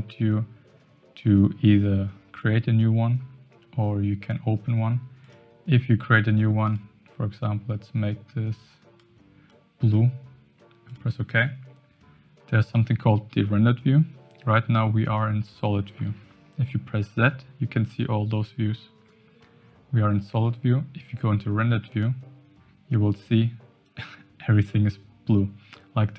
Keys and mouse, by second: 5.2-11.0 drag, 15.9 z.